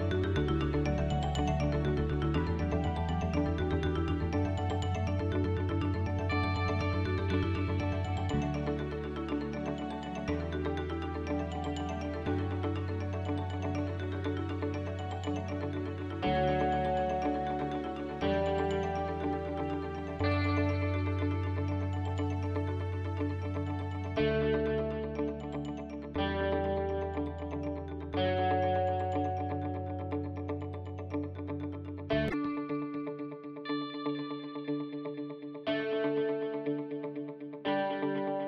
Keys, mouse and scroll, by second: 1.8 middle click, 2.9 Tab, 3.5 f, 5.2 click, 7.9 click, 8.4 a, 8.9 a, 8.9 l, 17.6 click, 18.3 scroll up 3, 18.6 shift+middle click, 20.0 a, 20.1 s, 21.4 g, 26.1 KP_7, 27.2 click, 29.0 KP_1, 30.5 r, 34.5 click, 36.6 s.